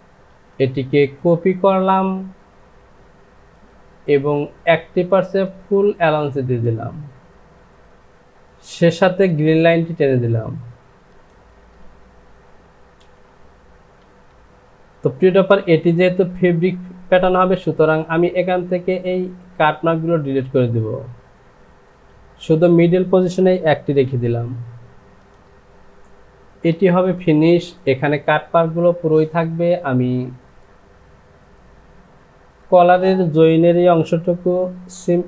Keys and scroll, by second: 0.3 ctrl+c, 7.9 Down, 14.2 Delete, 24.4 j, 26.7 Home.